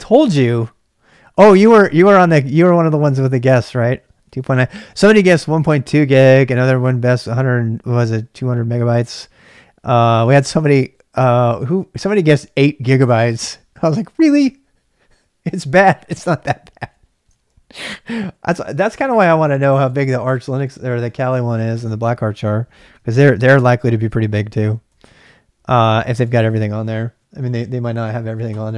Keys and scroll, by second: 17.8 ctrl+b, 18.0 ctrl+j, 18.2 ctrl+j, 23.4 ctrl+b, 23.7 ctrl+j, 24.7 ctrl+b, 24.9 ctrl+j, 25.0 ctrl+j, 26.0 ctrl+b, 26.2 ctrl+k.